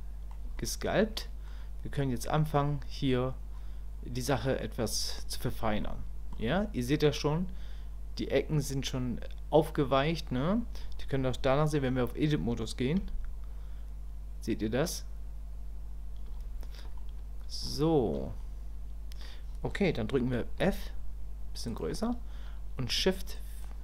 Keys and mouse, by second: 0.6 shift+click, 1.2 middle click, 2.5 middle click, 4.6 middle click, 5.8 shift+click, 17.0 click, 17.9 shift+click, 18.4 click, 23.3 shift+click.